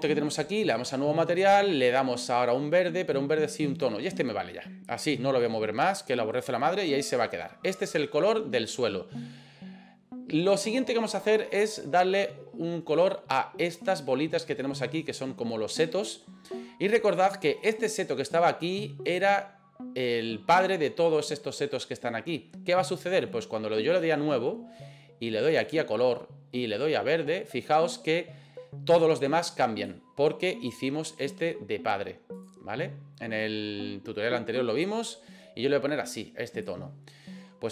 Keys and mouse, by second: 0.6 click, 1.5 click, 17.7 right click, 23.9 click.